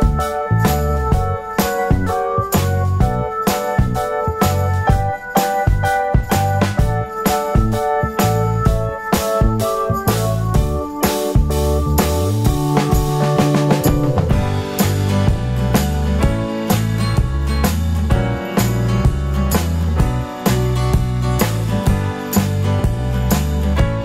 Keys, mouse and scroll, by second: 0.0 F3, 2.5 alt+middle click, 4.6 alt+middle click, 7.6 F3, 10.5 alt+middle click, 13.0 ctrl+click, 16.8 alt+click, 18.4 F3, 19.6 alt+middle click, 21.6 alt+middle click, 22.1 alt+middle click, 22.3 F3, 23.9 ctrl+click.